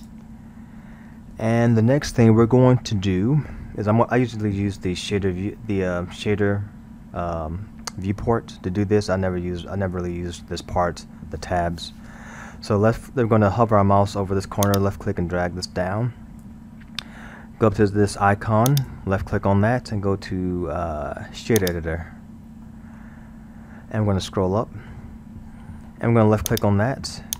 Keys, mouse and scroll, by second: 4.9-5.4 scroll, 9.4-12.1 scroll, 14.7-17.7 drag, 18.7-21.7 drag, 22.7-23.7 middle drag, 23.7-24.5 scroll, 24.5-25.2 middle drag, 25.2-26.5 scroll, 26.5 click.